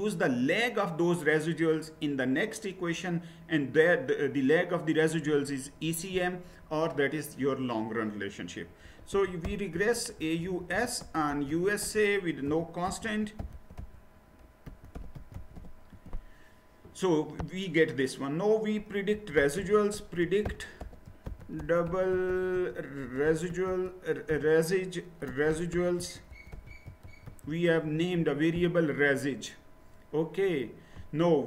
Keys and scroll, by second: 8.6-16.1 typing, 18.9-27.7 typing, 27.7 Return.